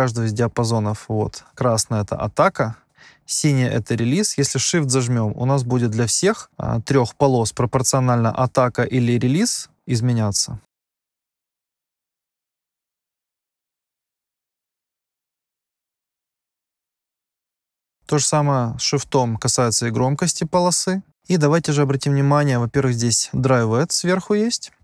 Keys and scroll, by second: 18.0 -.